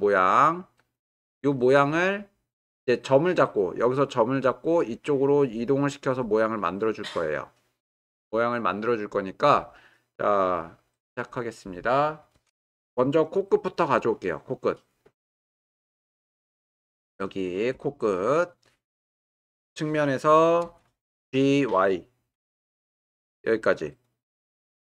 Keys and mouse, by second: 3.8 click, 4.9 click, 6.2 click, 8.3-9.2 drag, 13.1 click, 15.0 click, 15.7 middle click, 16.9 shift+middle drag, 17.4 ctrl+middle click, 18.1-18.5 drag, 22.4 g, 22.6 y.